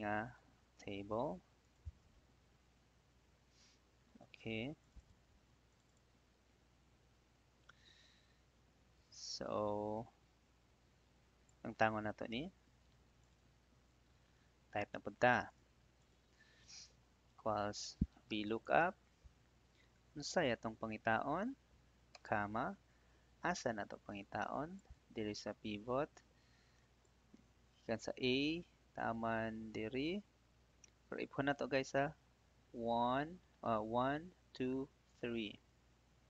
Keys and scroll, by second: 0.9 ctrl+c, 2.3 ctrl+v, 12.8 Delete, 17.2 =, 18.0 v, 18.6 Tab, 22.0 ,.